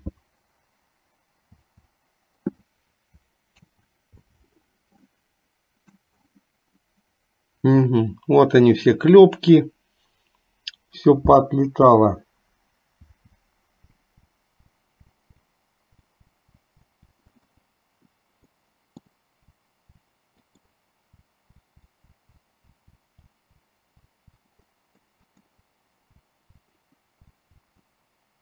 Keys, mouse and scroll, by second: 1.7 l, 3.7 ctrl+z, 5.2 middle click, 13.2-17.0 typing, 17.4 middle click, 18.5 middle click, 19.5 l, 20.0 l, 20.5 middle click, 21.2-24.3 typing, 24.7 middle click, 25.3 middle click, 26.2 l, 26.5 l, 27.5 l, 27.8-28.4 middle drag.